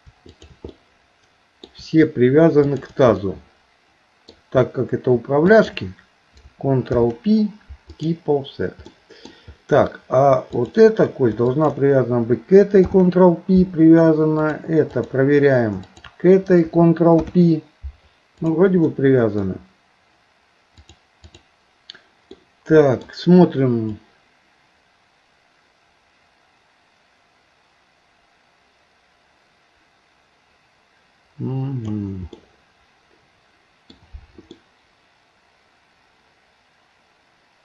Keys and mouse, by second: 0.4 shift+click, 0.8 middle click, 2.6 shift+click, 3.2-4.3 middle drag, 6.9 ctrl+p, 9.0 middle click, 10.5 click, 11.5 shift+click, 12.8 ctrl+p, 15.8 shift+click, 17.2 ctrl+p, 18.4 click, 18.9 middle click, 20.8 click, 22.4 middle click, 24.0-32.0 drag, 32.3-34.0 middle drag, 34.6-37.6 middle drag.